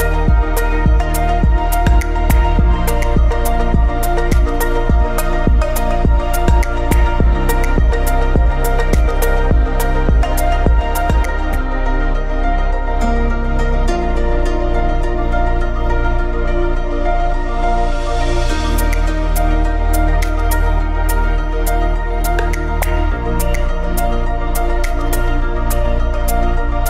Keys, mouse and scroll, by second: 8.9-10.3 middle drag, 10.3-10.6 scroll down 1, 11.6-11.9 scroll up 1, 12.8-13.7 scroll down 2, 13.7-14.4 middle drag, 14.4-15.5 scroll up 2, 15.5-15.9 scroll down 2, 15.9-16.4 middle drag, 16.4 scroll up 1, 21.2 click, 25.9 ctrl+shift+click.